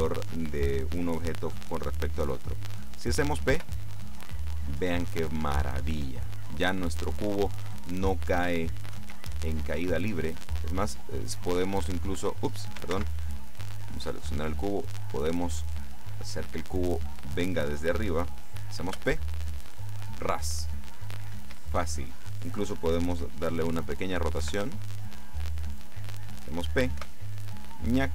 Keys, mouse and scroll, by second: 3.7 p, 9.0 Escape, 10.9 click, 13.1 ctrl+z, 13.6 ctrl+right click, 15.0-17.2 drag, 19.0 p, 21.5 Escape, 24.5 r, 25.7 click, 27.0 p.